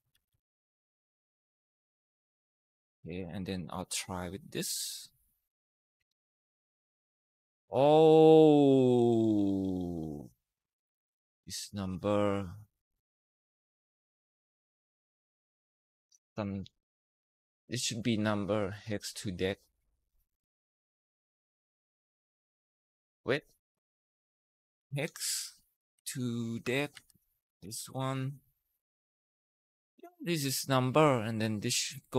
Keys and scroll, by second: 0.1 Tab, 0.3 Down, 1.1 ), 1.7 Tab, 5.8 Return, 6.4 Up, 17.0 Escape, 23.8-25.2 typing, 25.8 Down, 26.4 Tab, 26.7 Down, 27.2-27.9 typing, 28.2 Left.